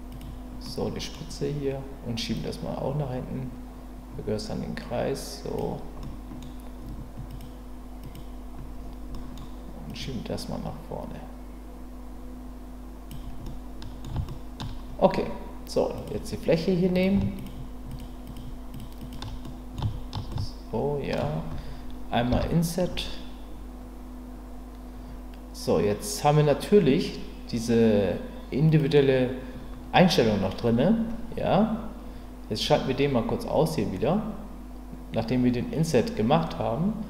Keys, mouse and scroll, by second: 0.1 click, 0.6 middle click, 2.4-5.5 drag, 6.0 middle click, 7.3 click, 8.0 click, 9.1 middle click, 9.9-13.1 drag, 13.5 middle click, 14.3 shift+middle click, 15.9 click, 17.4 shift+click, 18.2 shift+click, 18.7 shift+click, 19.0 shift+click, 19.4 middle click, 20.3 shift+middle click, 22.3 i, 28.7 click.